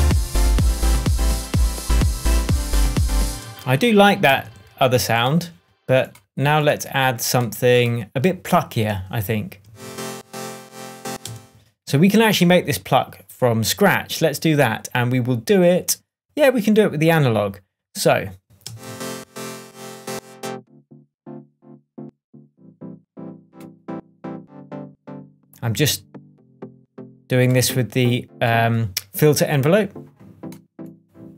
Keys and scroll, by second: 3.2 space, 4.3 super+d, 9.6 space, 11.2 space, 18.6 space.